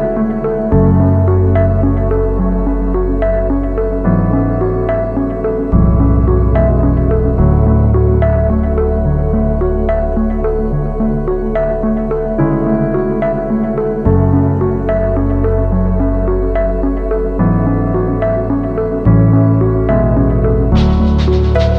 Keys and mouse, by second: 0.4 alt+click, 1.0 alt+shift+click, 1.6 alt+shift+click, 2.3 alt+shift+click, 3.1 alt+shift+click, 3.7 alt+shift+click, 4.4 alt+shift+click, 4.6 x, 5.9-8.0 middle drag, 9.0-10.6 shift+middle drag, 21.0 shift+middle click.